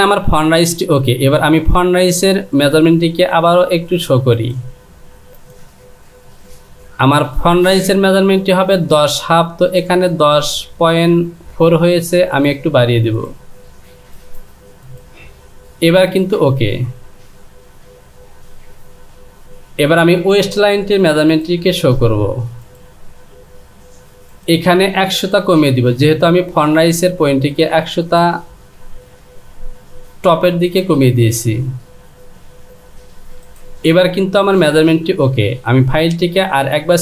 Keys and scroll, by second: 17.6 Home, 32.1 Down.